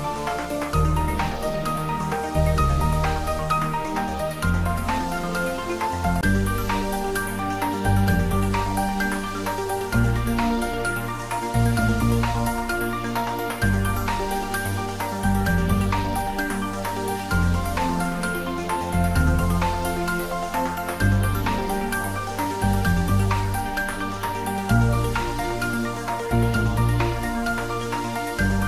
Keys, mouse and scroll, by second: 2.0-3.9 scroll down 1, 8.6 scroll down 1, 10.6 ctrl+z, 11.2-12.0 scroll down 1, 12.0-12.4 scroll up 1, 18.1 click, 24.0 click, 27.5 click.